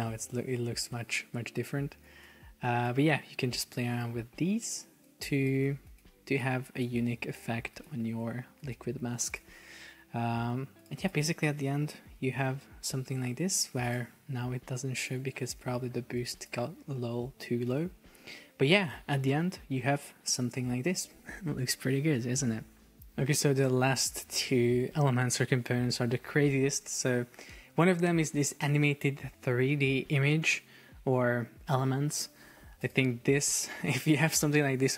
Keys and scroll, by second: 11.6 super+p, 13.1 Escape, 17.9 super+p.